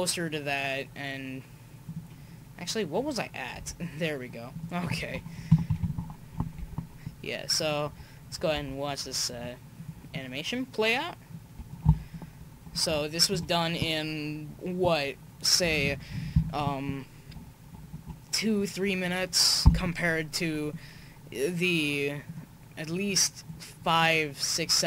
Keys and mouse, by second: 3.6 r, 5.5 Right, 5.7 Right, 6.6 r, 8.6-9.7 middle drag, 9.7-13.1 drag, 12.7 middle click, 13.3 KP_5, 20.3-22.2 middle drag, 22.2-24.0 drag, 24.0 middle click.